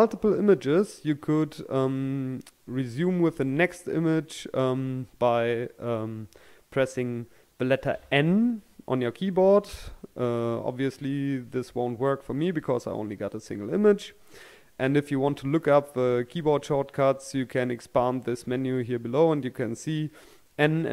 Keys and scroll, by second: 2.9-5.0 scroll down 1, 6.7-7.6 scroll down 1, 7.6 n, 9.1-10.6 scroll down 1, 10.6-12.7 scroll up 1, 17.2-18.6 scroll down 1.